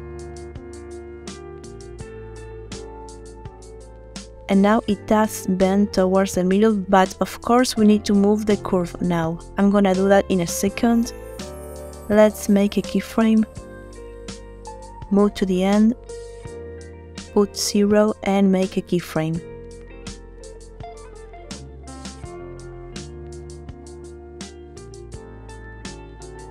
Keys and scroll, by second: 13.1 i, 17.1 0, 18.4 Return, 19.9 i.